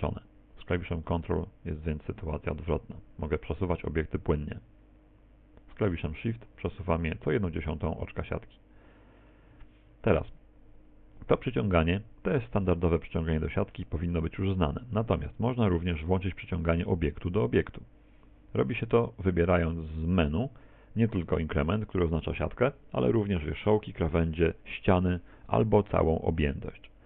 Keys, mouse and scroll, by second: 12.0 middle click, 13.3 middle click, 15.8 click, 19.2 click.